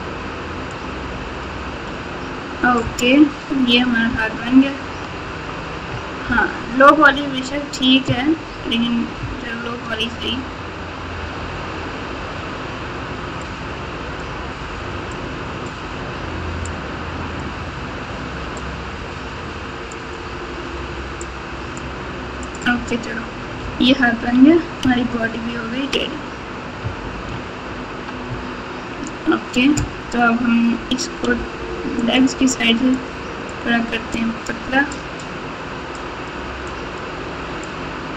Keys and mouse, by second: 0.7 click, 4.0 KP_9, 6.2-7.0 ctrl+KP_8, 7.4 KP_1, 9.1-9.9 ctrl+KP_6, 13.4 click, 15.1 click, 16.6 click, 18.5-19.9 drag, 21.2 click, 22.4 click, 23.6 KP_Subtract, 24.1 KP_Subtract, 24.1 KP_Subtract, 24.8-25.9 ctrl+KP_6, 26.8 KP_Subtract, 27.0 KP_Subtract, 27.1 KP_Subtract, 27.6 ctrl+KP_5, 28.2 ctrl+KP_2, 28.7 ctrl+KP_2, 28.8 ctrl+KP_2, 31.3 f, 33.2-34.4 drag, 35.0 click, 35.9-37.0 drag, 37.6-38.1 drag.